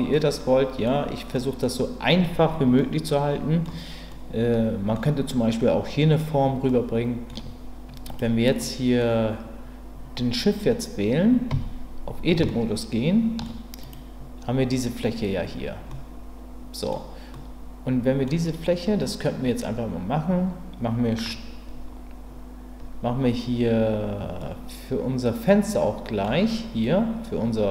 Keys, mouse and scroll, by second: 0.1-0.9 middle drag, 1.3 middle click, 2.9-3.6 middle drag, 4.1-4.9 middle drag, 6.7 middle click, 8.1 click, 8.6 middle click, 11.5 Tab, 12.5 shift+middle click, 13.8 click, 15.9-16.9 middle drag, 17.3 middle click, 24.4-26.2 middle drag.